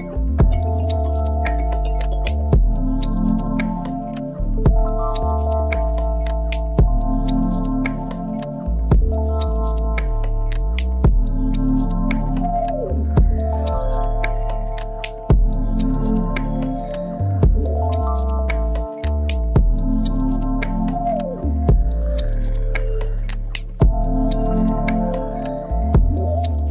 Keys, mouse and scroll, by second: 0.7 click, 1.1-3.4 shift+middle drag, 1.3 scroll up 2, 4.6 click, 8.5-10.5 drag, 10.5-14.0 middle drag, 10.9 scroll down 1, 12.9 shift+a, 13.4-14.0 scroll down 1, 14.0-15.8 drag, 15.4 s, 16.1 KP_Decimal, 16.4 scroll down 1, 16.6-20.5 middle drag, 17.5 s, 19.9 s, 20.5 click, 20.6-22.1 middle drag, 21.4 s, 22.1 click, 22.2-24.8 middle drag, 22.5-22.8 scroll up 2, 24.8-26.3 drag, 26.3-26.7 middle drag.